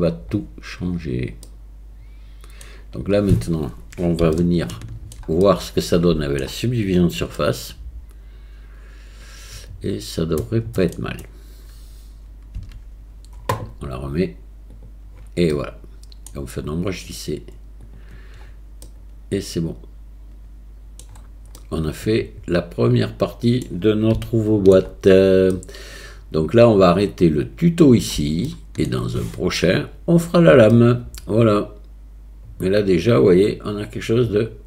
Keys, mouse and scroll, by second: 1.5-2.6 middle drag, 4.4 shift+middle click, 5.4 middle click, 7.4-10.8 middle drag, 12.6 Tab, 14.8 click, 15.5-16.3 middle drag, 17.0-18.0 drag, 18.9-21.0 middle drag, 21.6-23.6 middle drag, 24.2-24.7 shift+middle drag, 25.5-27.8 middle drag, 28.5-28.8 shift+middle drag, 30.7-34.6 middle drag.